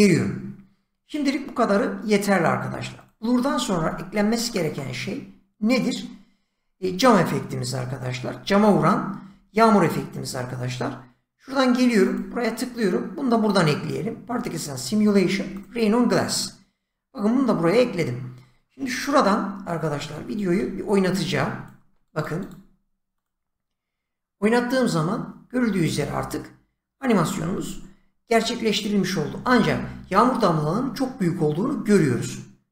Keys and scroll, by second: 20.5 <.